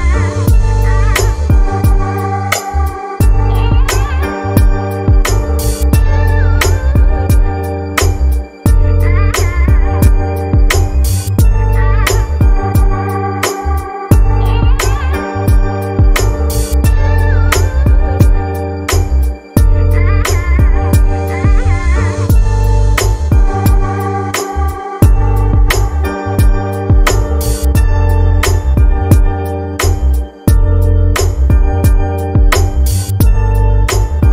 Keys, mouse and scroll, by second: 0.8-4.6 drag, 5.1 click, 6.2 click, 9.8-16.2 drag, 17.3 click, 19.6 click, 23.5 click, 25.7-26.5 scroll up 3, 27.9-28.6 scroll down 2, 32.6-34.3 drag.